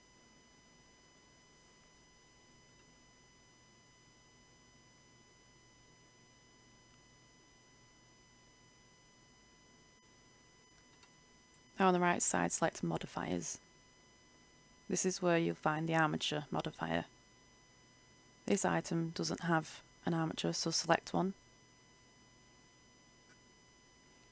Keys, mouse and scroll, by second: 0.3 shift+scroll, 1.2 shift+scroll, 1.6-2.2 scroll up 1, 2.2 right click, 3.5 Tab, 6.7 click, 7.9 Tab, 9.5 right click, 15.0-16.2 drag, 21.7 right click, 22.3-24.3 scroll down 1.